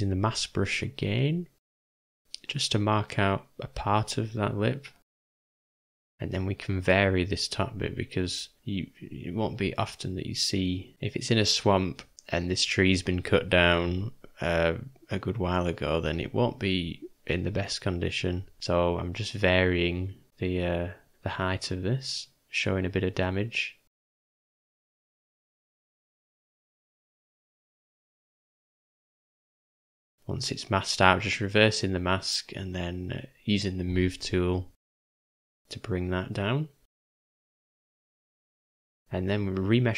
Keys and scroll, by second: 7.8 shift+/, 8.9 shift+m, 10.5 z, 12.0 shift+m, 16.7 shift+., 17.6 ,, 18.6 ,, 18.6 m, 19.9 m, 20.3 ], 20.3 ], 20.5 ], 24.5 [, 24.7 [, 25.0 [, 26.8 shift+/, 27.9 shift+m, 35.1 shift+., 37.3 v, 39.5 u.